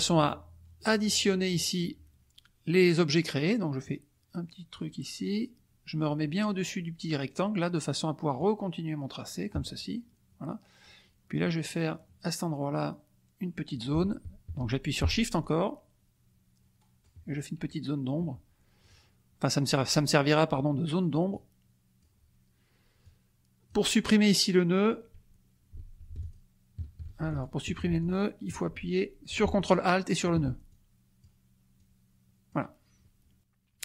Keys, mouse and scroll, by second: 3.8-4.9 shift+drag, 8.3-9.6 shift+drag, 15.4-16.7 shift+drag, 16.7-17.2 shift+scroll down 1, 18.8 click, 21.3 click, 23.0 click, 26.2 ctrl+shift+click, 27.4 ctrl+shift+click, 28.1 ctrl+shift+click, 29.6 ctrl+alt+click, 30.7 ctrl+alt+click, 31.7 click.